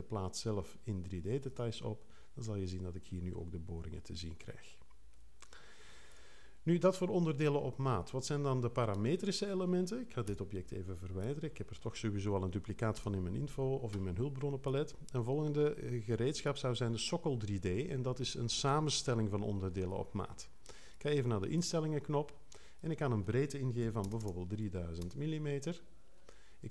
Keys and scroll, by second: 10.2 BackSpace, 12.9 0, 23.8 3, 24.1 0.